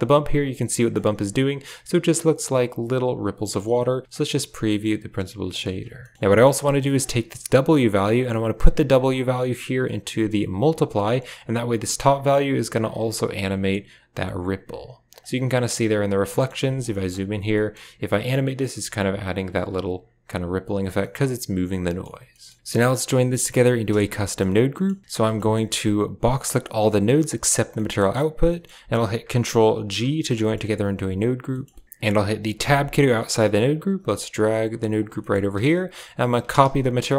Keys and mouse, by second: 0.7 shift+middle click, 3.3 middle click, 4.0 ctrl+shift+click, 6.1 middle click, 6.7 middle click, 8.0-10.4 drag, 10.6 click, 11.6-15.0 drag, 16.3 shift+click, 16.8 shift+click, 17.5 shift+click, 18.3 click, 20.9 middle click, 21.7 middle click, 22.2 middle click, 22.6 middle click, 23.2 middle click, 23.9-24.3 shift+middle drag, 24.6 middle click, 25.0 a, 25.4 shift+middle click, 26.2-27.4 drag, 27.6 middle click, 28.4 middle click, 28.5 click, 29.9 ctrl+g, 30.3 click, 31.4 click, 32.5 Tab, 33.0 middle click, 33.8 g, 35.1 middle click, 36.0 click.